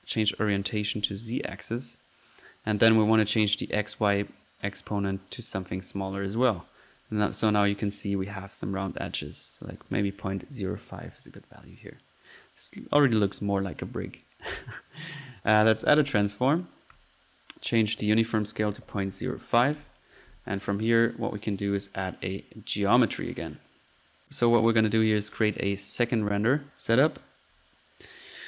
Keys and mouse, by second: 0.2-0.6 drag, 1.0 click, 1.5 drag, 4.0 click, 5.9 drag, 6.6 click, 7.7-9.1 drag, 9.5-10.2 drag, 11.7 middle click, 13.6-14.1 drag, 14.2 drag, 15.4 right click, 15.6-16.2 right drag, 15.6-16.3 typing, 17.8 click, 20.3 middle click, 20.6 drag, 21.4 right click, 21.5-22.2 typing, 22.2-22.6 drag, 24.2 click, 25.0-25.5 drag, 25.7 click, 26.0 right click, 26.6-27.6 ctrl+drag, 27.3 ctrl+middle click, 27.6-28.1 ctrl+drag.